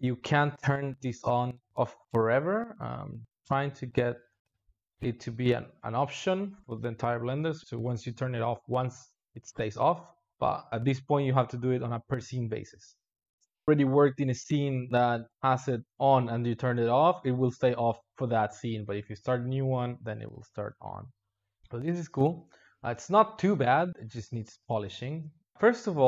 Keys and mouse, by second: 5.3 click, 6.0-6.6 drag, 6.6 Home, 8.4 space, 22.6 space, 23.0 alt+shift+z, 23.4 space, 24.9 space, 25.5 click.